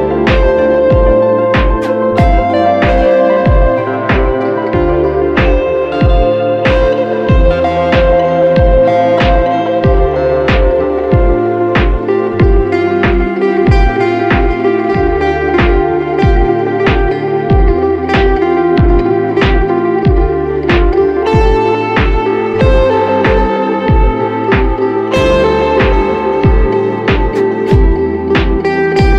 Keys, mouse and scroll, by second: 13.9 double click, 17.5 e.